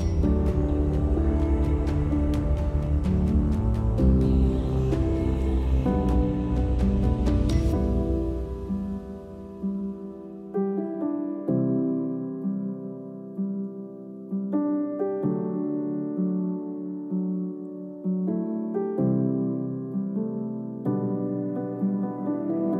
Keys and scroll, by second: 2.6 d, 3.6 z, 4.6 space, 8.1 space, 11.3 space, 13.0 space, 20.3 Delete.